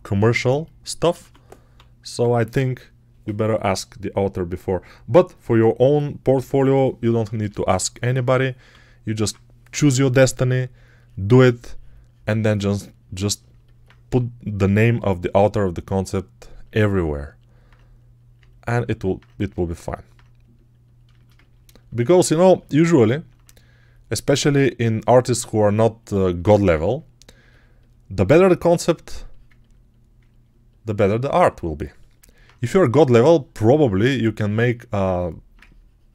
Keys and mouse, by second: 1.1 1, 1.6 [, 8.1 1, 8.6 [, 9.1 [, 10.0 [, 13.9 g, 16.6 ctrl+alt+click, 18.2 alt+click, 18.6 ctrl+alt+click, 19.7 alt+click, 19.9 alt+click, 21.5-24.8 alt+shift+drag, 30.1-32.5 ctrl+alt+drag, 32.5-35.1 right drag, 32.5 1.